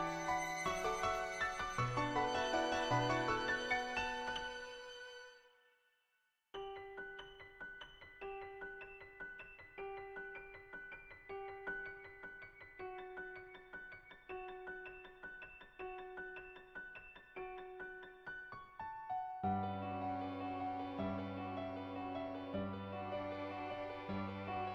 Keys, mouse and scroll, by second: 0.1 click, 1.3 click, 2.8 shift+click, 3.1 middle click, 4.0 middle click, 4.7 shift+click, 8.2 click, 9.3 ctrl+z, 9.6 \, 9.7 \, 10.0 click, 10.4 ctrl+z, 10.6 \, 10.8 click, 10.8 \, 12.8 ], 13.1 ], 13.4 ], 13.6 click, 14.1 ctrl+z, 14.5-15.9 typing, 15.2 click, 15.7 ctrl+z, 15.9 click, 16.5 click, 19.5-20.8 drag, 21.4 click.